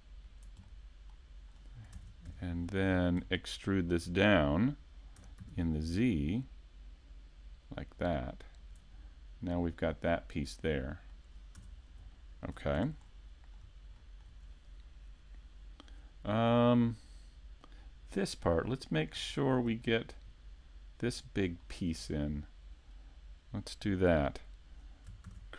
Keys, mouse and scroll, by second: 0.4 click, 0.7 middle click, 1.9 ctrl+Tab, 2.9 right click, 3.3 middle click, 5.2 middle click, 8.7 click, 9.5-9.9 scroll down 1, 11.1 middle click, 11.6 Tab, 11.8-12.4 scroll down 2, 12.1 shift+middle click, 12.8 a, 13.1 middle click, 14.0 shift+middle click, 18.6 shift+middle click, 19.3-21.6 scroll down 2, 19.8 shift+middle click, 21.6 shift+middle click, 25.3 shift+a.